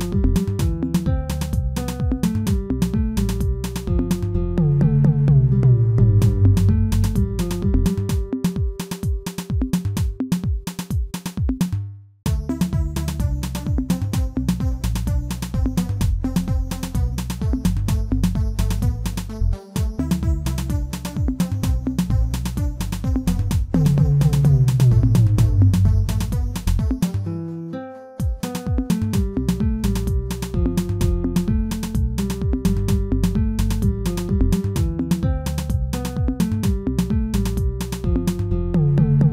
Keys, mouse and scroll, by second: 0.0 Tab, 0.3-1.5 middle drag, 1.5 ctrl+z, 1.8 ctrl+z, 2.3-4.0 middle drag, 4.0 g, 6.1-7.4 middle drag, 7.4 g, 9.3 Tab, 10.4-14.7 drag, 14.7-15.6 middle drag, 15.6 Tab, 16.1 Tab, 16.4 scroll down 2, 16.6-17.5 middle drag, 17.5 Tab, 17.7-18.4 scroll up 2, 19.6 ctrl+r, 21.3 ctrl+z, 22.3 ctrl+r, 25.6 ctrl+r, 27.4 ctrl+z, 27.7-29.0 scroll up 2, 29.0 ctrl+r, 30.8 Tab, 31.0-31.4 scroll down 2, 31.4-32.7 middle drag, 32.7 KP_1, 33.3-34.5 scroll down 3, 34.5 scroll up 2, 35.1-36.6 shift+middle drag, 36.6 alt+h, 37.1 scroll down 2, 38.3-38.8 scroll up 2, 38.8 click.